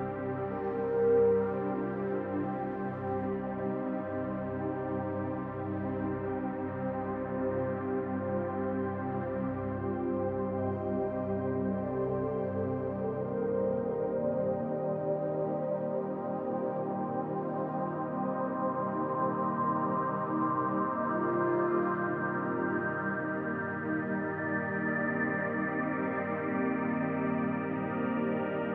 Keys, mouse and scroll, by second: 0.4 click, 4.1 click, 7.7 ctrl+r, 11.1 click, 11.9 shift+click, 13.0 click, 14.4 click, 14.5 shift+click, 15.2 shift+click, 15.4 shift+click, 16.4 s, 20.4 click, 20.9 shift+click, 22.0 s, 25.4-26.1 scroll up 2, 26.2 shift+click, 26.7 shift+click, 28.1 click.